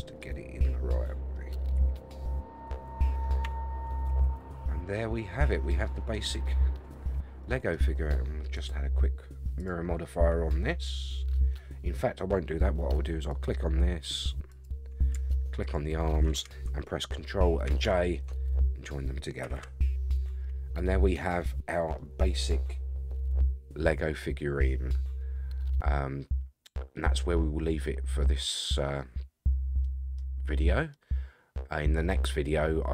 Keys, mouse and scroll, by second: 0.7 middle click, 1.7 r, 3.0-3.4 scroll down 2, 3.4 Tab, 3.7 scroll down 3, 4.1 a, 4.2 a, 4.3-6.4 middle drag, 6.4 scroll up 1, 7.1 scroll up 3, 7.4 middle click, 8.5 click, 9.6-11.6 drag, 13.3 click, 14.5 click, 15.6 shift+click, 17.6 ctrl+j, 19.4 a, 19.6 a, 20.0-20.4 scroll down 3, 20.4-21.4 middle drag, 21.6 scroll down 2, 22.0-30.2 middle drag, 30.4 scroll up 5, 30.9-32.9 middle drag.